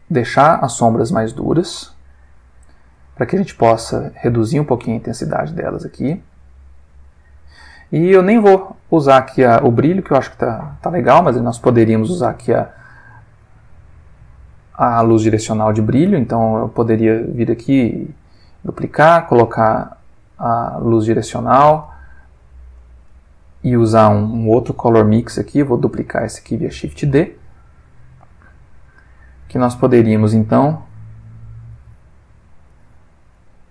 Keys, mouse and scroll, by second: 0.8-1.8 drag, 3.0-3.7 drag, 4.1 click, 5.3 click, 6.7 click, 7.9 click, 8.6-9.7 middle drag, 10.3-10.8 middle drag, 11.2-11.8 drag, 13.1 middle click, 14.0 click, 16.0 shift+s, 17.3 shift+d, 18.4 click, 20.6-21.6 drag, 21.8 click, 22.9 middle click, 23.6 click, 24.8 shift+click, 25.4 shift+click, 26.2 shift+d, 26.9 click, 28.2-29.0 drag, 29.8 click, 30.7 click, 32.7 click.